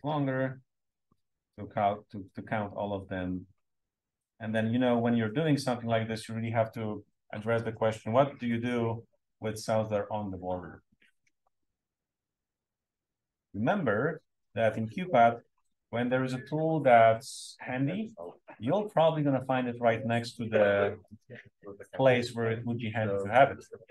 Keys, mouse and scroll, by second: 0.3-1.3 scroll up 1, 0.9 click, 1.3-2.1 scroll down 1, 2.1-8.2 scroll up 2, 8.2-11.8 scroll up 1, 11.8-14.1 scroll down 1, 14.1-14.5 scroll down 1, 21.0 click.